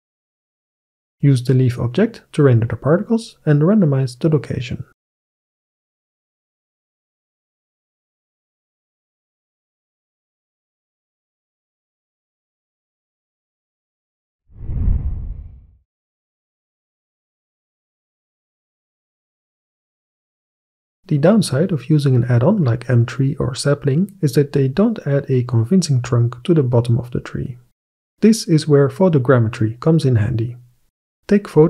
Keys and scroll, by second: 10.3 alt+F9.